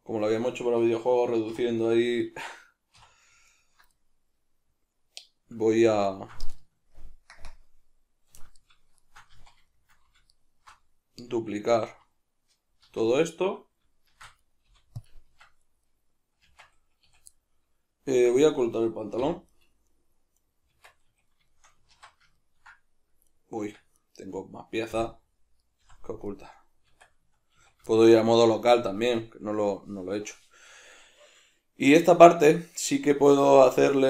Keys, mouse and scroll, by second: 1.5 2, 3.0 3, 3.4 alt+right click, 3.9-6.1 middle drag, 6.1 alt+shift+right click, 6.9 ctrl+KP_Add, 7.3 ctrl+KP_Subtract, 9.0 alt+shift+right click, 9.3 z, 9.7-10.3 shift+middle drag, 10.3 alt+shift+right click, 10.7-14.5 middle drag, 12.9 z, 14.1 shift+d, 14.5 right click, 14.7 p, 15.3 Tab, 15.7 right click, 15.9 right click, 16.5 Tab, 17.1 a, 17.3-18.5 middle drag, 18.1 Tab, 18.5 right click, 19.2 h, 19.5 right click, 19.9 right click, 20.1 right click, 20.4 right click, 20.7 Tab, 21.1 a, 21.5-23.3 shift+middle drag, 21.9 alt+q, 23.3 right click, 23.6 Tab, 24.0 right click, 24.9 h, 25.6 right click, 25.8 h, 26.3 right click, 26.5 right click, 26.9 Tab, 27.6 a, 27.9-34.0 shift+middle drag.